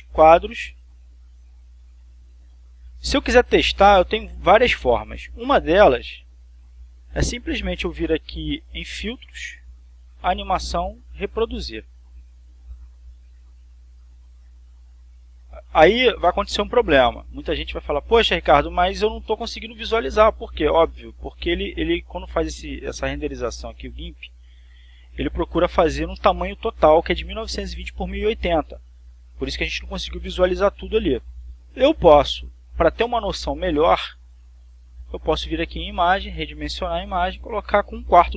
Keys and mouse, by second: 0.3 click, 1.9 click, 2.8 click, 4.1 click, 6.6 click, 9.4 click, 12.0 click, 14.6 click, 23.9 click, 25.3 click, 35.6 click, 36.9 click, 37.6 click.